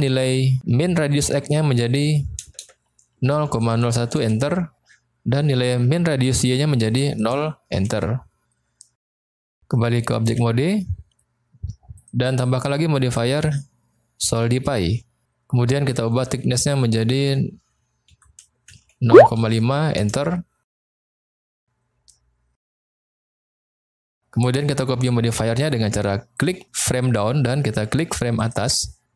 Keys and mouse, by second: 1.0-4.8 drag, 2.5 BackSpace, 6.4-8.6 drag, 10.3 Tab, 11.9 click, 13.1-14.8 drag, 16.1-20.6 drag, 18.3 Right, 22.5 click, 26.3 click, 28.4 shift+click.